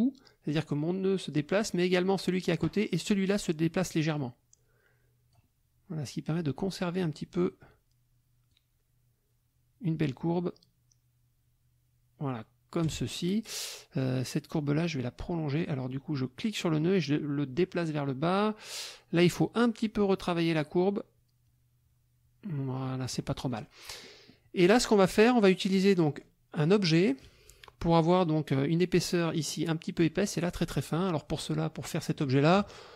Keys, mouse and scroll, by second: 4.0-5.5 alt+drag, 8.5-13.0 alt+drag, 13.1 alt+click, 14.5-18.6 drag, 19.6-23.2 drag, 23.5 click, 24.0 click.